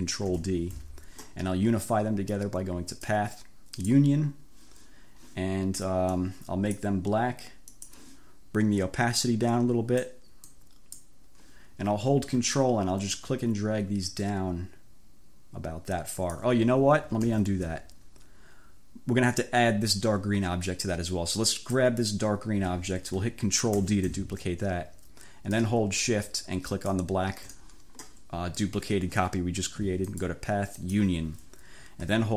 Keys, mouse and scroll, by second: 0.4 ctrl+d, 3.0 click, 3.8 click, 6.3 click, 7.7 click, 9.3-10.3 drag, 10.5 click, 13.2-16.6 ctrl+drag, 17.3 ctrl+z, 21.6 click, 23.8 ctrl+d, 26.8 shift+click, 30.1 click, 30.9 click.